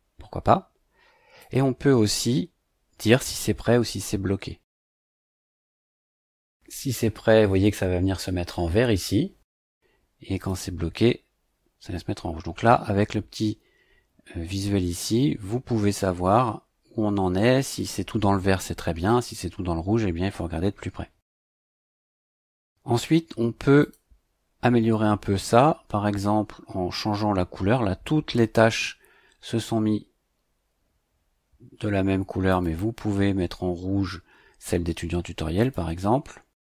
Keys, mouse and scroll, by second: 1.4 click, 6.4 click, 9.5 click, 10.4 click, 23.8 click, 32.5 click, 35.6 click.